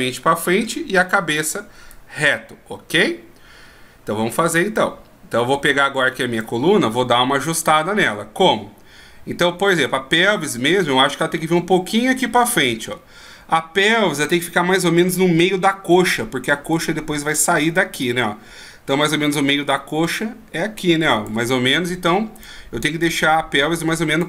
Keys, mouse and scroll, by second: 2.0 d, 2.1 right click, 6.6 d, 9.8 right click, 11.4 click, 13.3 shift+scroll down 1, 16.9 click, 19.8 d, 19.9 click, 21.5 d, 21.7 d, 22.6 right click, 23.2 click.